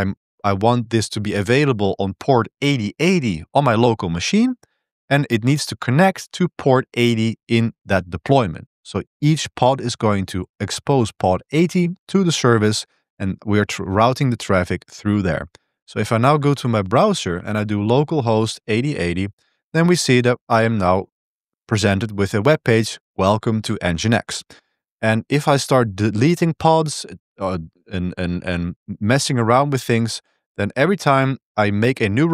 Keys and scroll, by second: 14.4 Return, 15.7 super+1, 15.7 c.